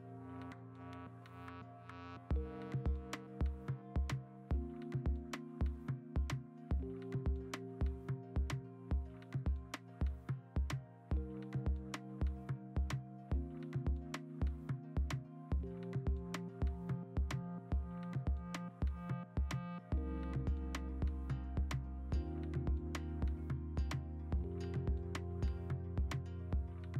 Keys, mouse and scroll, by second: 2.0 scroll, 3.1-3.8 scroll, 11.0-12.7 typing, 13.0 ctrl+alt+z, 13.4 ctrl+t, 17.8 ctrl+alt+g, 18.4 ctrl+alt+z, 18.7 ctrl+alt+z, 20.3 ctrl+alt+g, 20.8 typing, 22.7 v, 24.7 ctrl+alt+g.